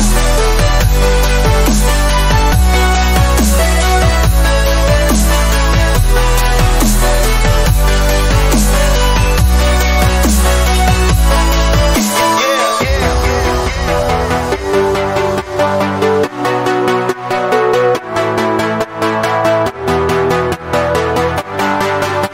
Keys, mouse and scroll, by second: 2.7 ctrl+alt+g, 6.1 ctrl+d, 7.0 typing, 8.0 typing, 18.8 click.